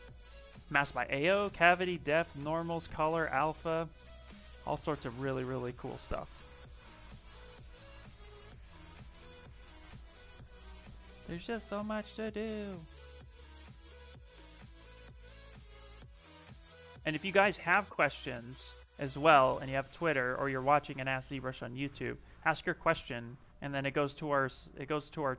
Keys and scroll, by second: 9.5 s, 12.2 space, 13.4 space, 22.4 s.